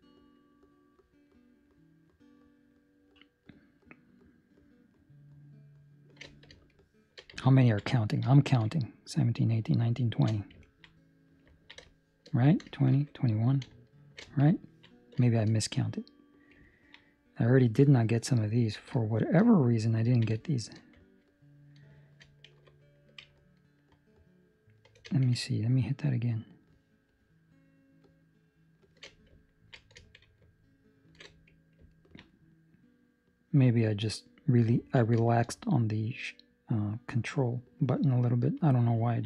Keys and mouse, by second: 1.2 alt+shift+right click, 6.7 shift+middle click, 7.4 ctrl+middle click, 8.6 shift+space, 8.9 shift+right click, 9.1 shift+space, 9.3 shift+right click, 9.6 shift+right click, 9.6 shift+space, 10.2 shift+right click, 10.2 shift+space, 10.6 ctrl+middle click, 10.9 middle click, 11.5 ctrl+middle click, 12.1 shift+middle click, 13.9 alt+shift+right click, 14.5 ctrl+middle click, 15.2 shift+middle click, 15.5 middle click, 16.6 ctrl+middle click, 17.1 middle click, 18.5 ctrl+middle click, 18.9 shift+middle click, 19.4 middle click, 20.1 ctrl+middle click, 20.3 shift+middle click, 20.9 middle click, 25.7-28.9 alt+shift+right click, 29.4 ctrl+middle click, 30.4 alt+shift+right click, 31.1 alt+shift+right click, 31.9 ctrl+middle click, 32.2 middle click, 34.7 ctrl+middle click, 35.1 shift+middle click, 35.6 middle click, 39.0 ctrl+middle click.